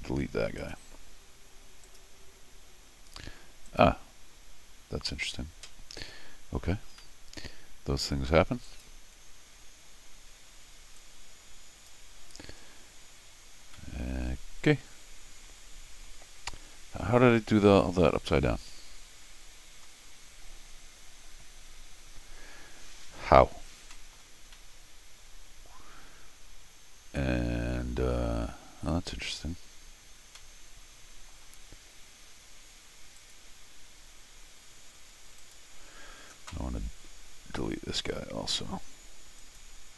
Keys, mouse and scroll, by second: 0.6 click, 1.8 click, 3.7 click, 7.0-8.3 middle drag, 8.6 click, 11.0 click, 13.7-19.8 middle drag, 23.6 scroll down 2, 23.9 scroll up 2, 23.9 middle click, 24.5-28.1 middle drag, 28.8 scroll up 1, 30.4 middle click, 33.2 click, 35.4 click, 39.4 click.